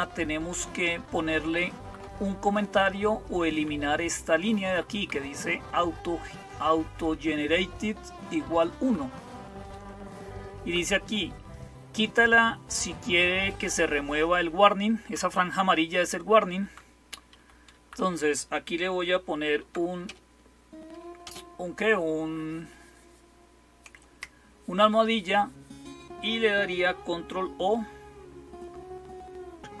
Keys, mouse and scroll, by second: 0.0-29.8 typing, 0.7 Right, 1.4-1.7 Right, 2.3 Left, 2.9-3.4 Left, 3.6 Left, 4.5 Right, 4.8 Right, 8.6 Right, 9.2 Right, 9.9-10.5 Right, 13.3-14.9 Right, 15.6 Up, 16.5 Down, 17.2 Up, 17.6 Right.